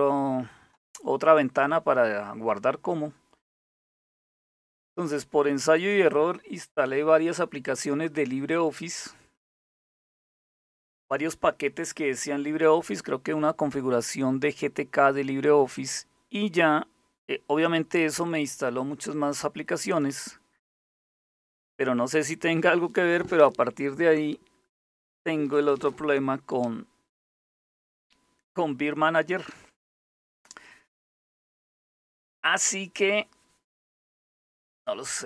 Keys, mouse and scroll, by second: 3.8 click, 4.6 click, 5.4 click, 15.4 click, 19.5 click, 20.4 click, 28.8 click.